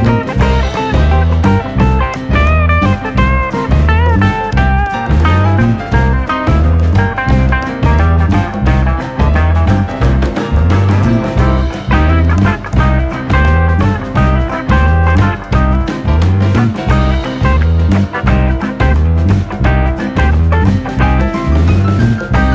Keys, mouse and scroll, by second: 0.2 scroll down 1, 0.4 shift+middle click, 0.6-0.9 scroll up 5, 0.9 click, 1.1 click, 1.6 scroll down 2, 1.8 shift+middle drag, 1.9-2.2 scroll up 5, 2.2-2.5 shift+middle drag, 2.5 drag, 3.6-4.2 scroll down 7, 3.8 shift+middle click, 4.2 middle click, 4.5 click, 4.7-5.5 shift+middle drag, 5.5-5.8 scroll up 2, 6.2 click, 6.4 scroll up 2, 6.5-7.1 shift+middle drag, 7.1 Tab, 7.2-7.9 scroll up 2, 7.6 shift+middle click, 7.9 shift+middle click, 8.5 click, 8.7 middle click, 9.1 click, 10.4 middle click, 11.3 click, 11.7 middle click, 12.0 click, 12.6-14.4 middle drag, 14.4 scroll up 1, 14.6 middle click, 14.9 alt+/, 15.1 middle click, 15.4 shift+click, 15.7 alt+/, 15.9 middle click, 16.3 click, 17.4 scroll down 3, 17.6 middle click, 18.1 Tab, 18.3 click, 18.6 click, 19.2 scroll down 1, 19.3 space, 19.6 middle click, 19.8 space, 20.0-20.3 middle drag, 20.3 click, 20.5 middle drag, 20.7 scroll up 2, 21.0 click, 21.2 Tab, 21.4-21.7 scroll up 1, 21.7 click.